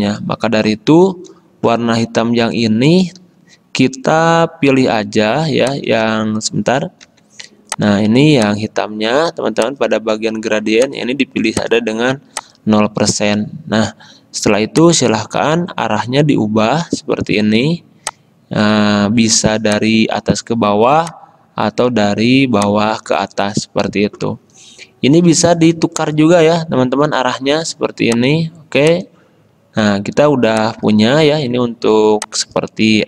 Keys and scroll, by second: 5.3 a, 7.2 g, 31.8 z.